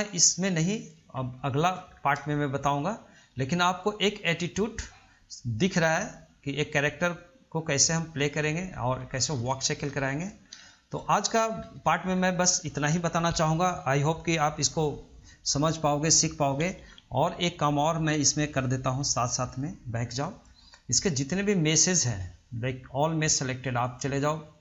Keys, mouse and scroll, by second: 0.3 middle click, 0.8-1.6 scroll up 1, 1.6-2.1 shift+middle drag, 2.1 scroll down 2, 2.5-4.0 shift+middle drag, 4.0-6.9 drag, 7.8-8.9 middle drag, 8.9 scroll up 1, 9.3-9.9 shift+middle drag, 9.9-10.2 scroll down 1, 10.2 shift+middle click, 10.6 scroll up 1, 10.9-11.8 shift+middle drag, 11.8 scroll up 1, 12.0-15.4 shift+middle drag, 19.1-20.2 drag, 20.2 scroll down 1, 20.5-23.5 middle drag, 24.0-24.6 drag.